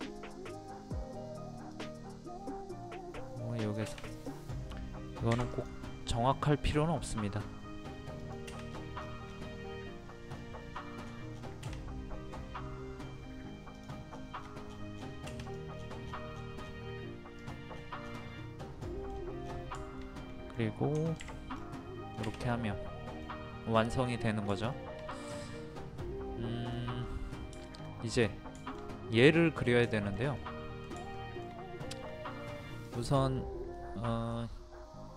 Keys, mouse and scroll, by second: 1.7 click, 5.3 p, 5.5 click, 6.5-7.6 middle drag, 8.2 click, 8.7 scroll down 1, 10.0 scroll up 1, 11.0 scroll down 1, 13.8 click, 14.1 scroll down 1, 15.4 click, 15.7 scroll down 1, 15.8 scroll up 1, 16.0-17.4 scroll down 1, 17.4 click, 17.7-18.1 scroll down 1, 18.4 middle click, 19.1-19.4 scroll down 1, 19.7 shift+middle click, 21.5-23.6 middle drag, 24.1 scroll down 1, 24.7-26.6 shift+middle drag, 26.6-26.9 scroll down 1, 27.1 scroll up 1, 27.2 scroll down 1, 27.6 shift+middle click, 28.6-31.0 shift+middle drag, 31.1 shift+middle click, 32.8 click, 33.7 middle click.